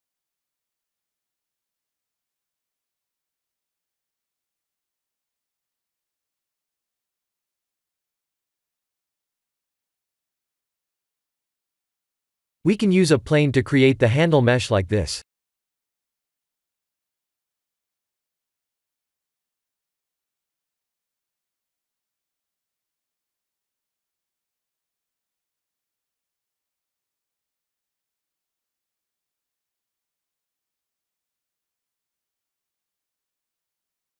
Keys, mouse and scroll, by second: 2.4 click, 3.0 shift+click, 3.4 r, 5.2 Tab, 7.5 click, 8.4 click, 8.7 g, 9.8 Tab, 10.2-10.6 scroll down 4, 13.0 shift+middle click, 13.7 click, 14.0 shift+a, 19.0-19.8 scroll down 6, 19.8 r, 22.0 g, 25.8-26.2 scroll up 4, 26.2 scroll down 1, 27.1 Tab, 27.7 shift+middle click, 28.4 s, 33.1 g.